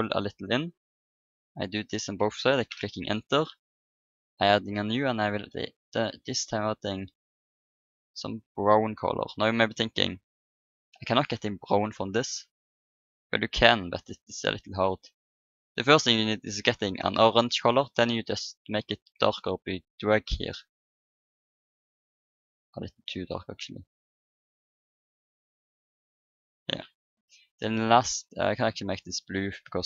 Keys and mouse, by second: 4.1-8.5 drag, 8.9 click, 22.9-25.0 drag, 28.8-29.8 drag.